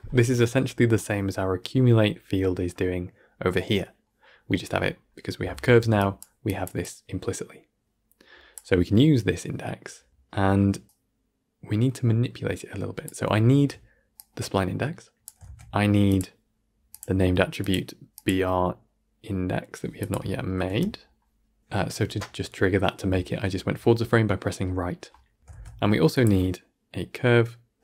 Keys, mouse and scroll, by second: 5.9 click, 16.9 shift+a, 20.6 Right, 22.9-25.4 drag, 25.4 x.